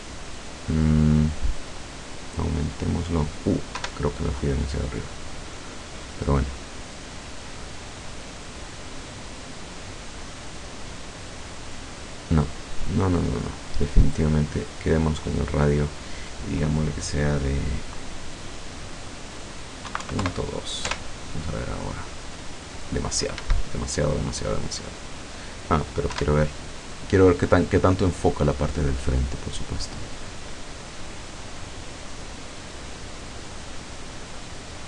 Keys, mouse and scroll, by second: 1.5-3.1 drag, 3.8 F12, 13.5 click, 14.5 click, 15.7 click, 19.9 KP_Decimal, 20.1 KP_2, 20.3 KP_Enter, 21.1 F12, 23.4 Escape, 26.2 F12.